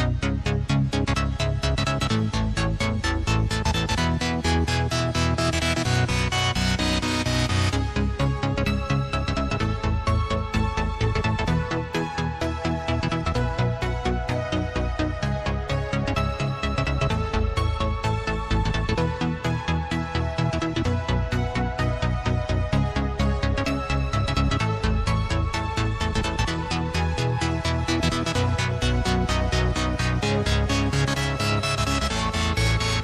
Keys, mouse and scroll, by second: 0.0 click, 1.1 alt+click, 1.9 click, 2.7 shift+click, 3.2 scroll down 1, 4.5 click, 6.6 shift+click, 7.7-9.0 drag, 9.8 click, 12.1 ctrl+b, 15.4 Tab, 15.8-16.9 scroll down 1, 16.9 click, 18.9 Tab, 19.6 click, 20.7 shift+click, 21.6 shift+click, 22.9 shift+click, 24.0 ctrl+b, 26.1 Tab, 26.9 click, 29.9 click, 30.5 click.